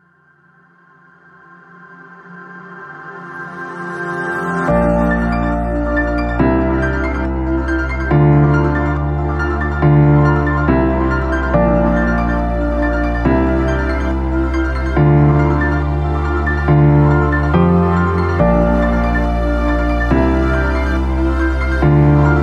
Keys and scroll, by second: 2.3 ctrl+z, 4.5 space, 8.2 space, 15.4 space, 20.9 ctrl+KP_0.